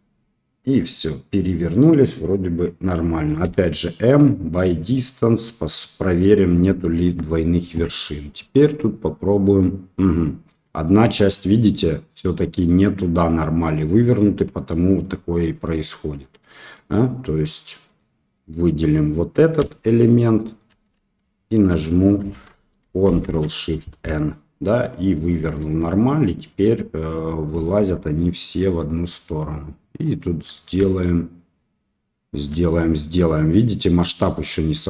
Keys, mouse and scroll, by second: 3.4 m, 6.5 middle click, 6.9 Tab, 8.6-10.1 drag, 10.4 middle click, 12.6-13.9 drag, 15.3 Tab, 16.2 middle click, 17.8 click, 19.5 l, 20.7 l, 23.0 ctrl+shift+n, 24.6 click, 25.6 Tab, 25.8-26.9 drag, 26.9 middle click, 28.2-30.0 shift+drag, 30.9-32.3 shift+drag.